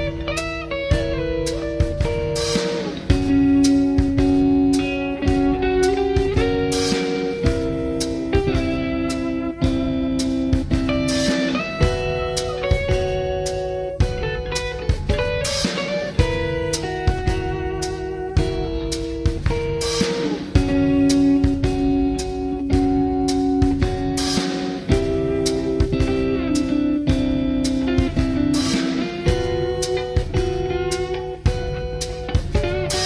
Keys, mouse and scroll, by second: 1.7 click, 2.0 click, 3.0 middle click, 3.9 middle click, 4.5 scroll down 2, 7.5 space, 7.7 Return, 10.0 s, 16.6 click, 17.4 g, 18.7 click, 20.0 s, 22.8 click, 23.0 s, 24.2 click, 25.5 g, 30.7 click, 31.5 g.